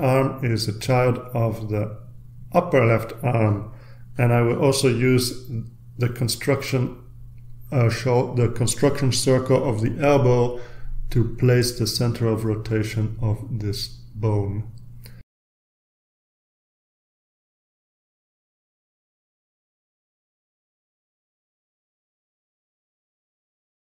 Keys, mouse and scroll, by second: 2.6-3.2 drag, 3.2-3.9 scroll down 1, 4.2-6.2 drag, 6.7 click, 9.5-10.2 drag, 10.7 click, 11.3-11.9 scroll up 1, 12.0-12.7 scroll down 2, 12.9 click, 16.1-17.9 typing, 18.9 Return, 21.4 click, 23.2-23.9 drag.